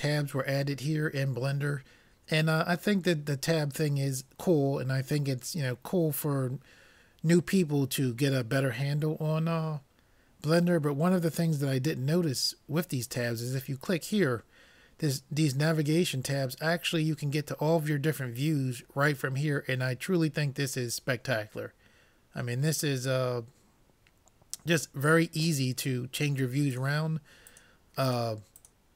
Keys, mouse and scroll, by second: 14.1-15.8 drag, 25.6-28.9 drag.